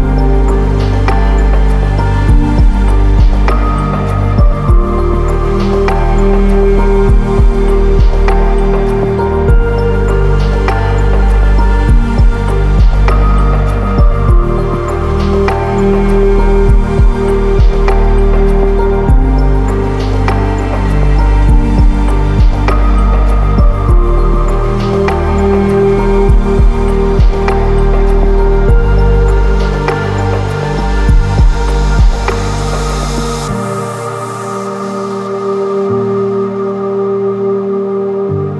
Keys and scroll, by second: 2.4 ctrl++, 2.5 ctrl++, 2.6 ctrl++, 7.5 ctrl+-, 7.8 ctrl+-, 11.2 ctrl+z, 18.4 ctrl+-, 18.6 ctrl+-, 18.7 ctrl+-, 24.8 ctrl+z.